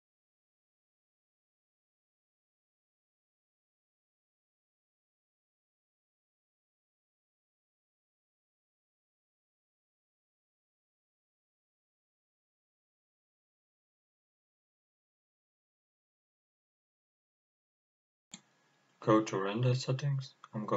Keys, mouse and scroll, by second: 5.8 click, 6.5 scroll up 1, 8.5-14.5 drag, 15.6 click, 18.8 click, 20.4 click.